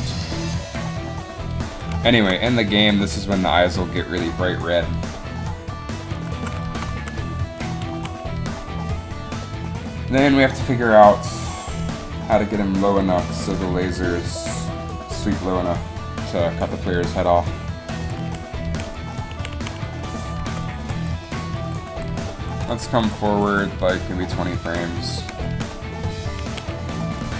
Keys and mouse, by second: 6.3 right click, 6.4 z, 7.0 z, 8.0 a, 18.3 a, 18.8 a, 19.5 a, 19.7 a, 20.6-23.3 Right, 23.5 Right, 23.6 Right, 25.1 KP_3, 26.5 a, 27.3 click.